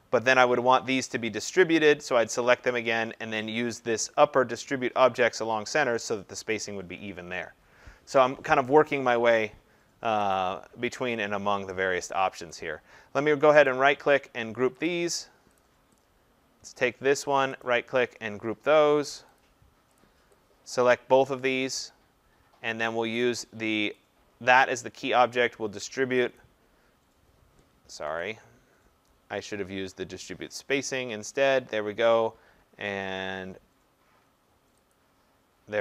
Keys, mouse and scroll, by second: 5.4 click, 10.3 click, 12.5 click, 13.6 right click, 14.8 click, 15.6 click, 16.6 click, 17.6 right click, 19.4 click, 20.0 click, 20.8 click, 24.0 click, 26.4 click, 28.1 ctrl+z, 34.9 click.